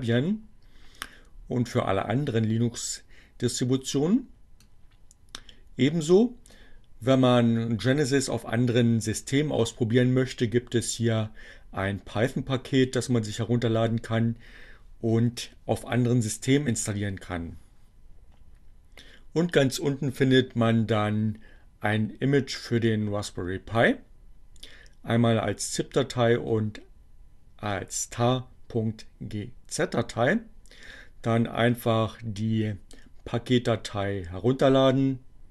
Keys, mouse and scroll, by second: 3.3-6.9 drag.